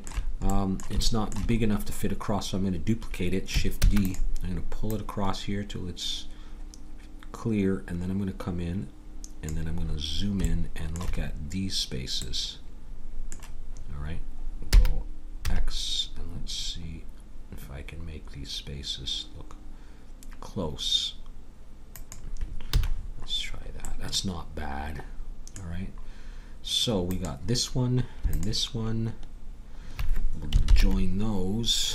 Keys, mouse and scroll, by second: 3.8 shift+d, 9.9 middle click, 14.7 g, 22.7 a, 24.9 middle click, 25.9-27.1 middle drag, 27.1-30.2 drag, 30.7 ctrl+j.